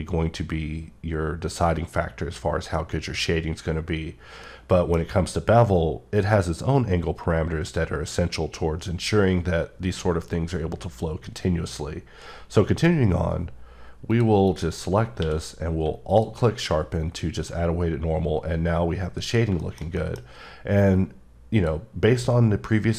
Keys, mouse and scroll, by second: 4.4 middle click, 14.1 click, 14.5 click, 15.2 q, 16.1 alt+click, 19.0 scroll up 1, 19.2-19.5 scroll down 1, 19.6 shift+middle click, 20.0 middle click, 20.1 scroll down 1, 21.5 click.